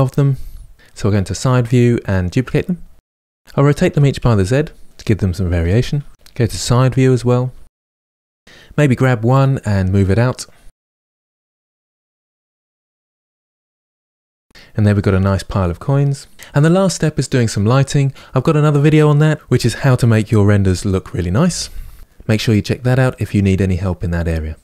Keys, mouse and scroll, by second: 0.8-3.7 typing, 2.6 shift+middle click, 3.5 click, 4.6 click, 5.0-7.3 typing, 6.2 click, 6.9 click, 8.1 middle click, 8.3 scroll down 2, 8.4 click, 9.7-14.1 typing, 11.2 middle click, 11.2 click, 11.9 middle click, 12.3 middle click, 12.7 middle click, 13.0 middle click, 13.6-14.0 middle drag, 14.0 click, 14.4 scroll down 2, 14.5-24.6 shift+middle drag.